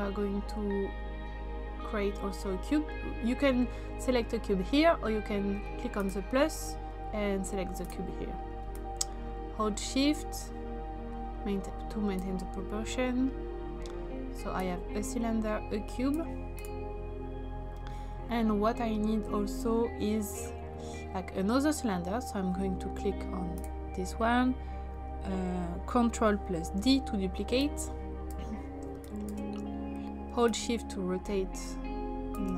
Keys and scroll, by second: 26.8 ctrl+d.